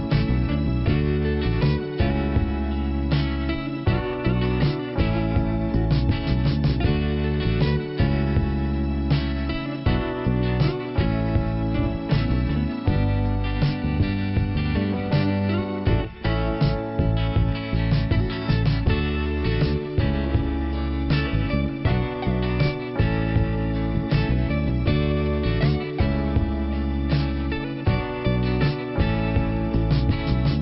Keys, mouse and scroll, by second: 1.0-1.8 scroll down 1, 2.8 click, 5.8 click, 6.4 click, 6.8 scroll down 2, 7.9 click, 8.7 click, 10.4 click, 11.4 click, 14.9 click, 16.0 click, 18.0 click, 21.4 click, 22.8 click, 26.9 click, 28.0 click.